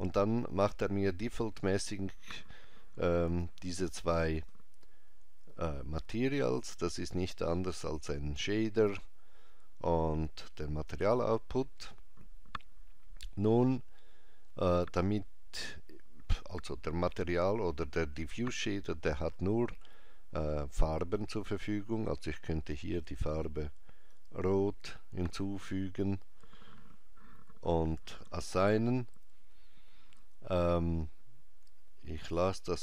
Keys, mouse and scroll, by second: 3.2 b, 5.5 click, 7.9 click, 11.7-13.7 scroll up 2, 13.7-14.5 scroll down 1, 21.3 click, 32.1 click.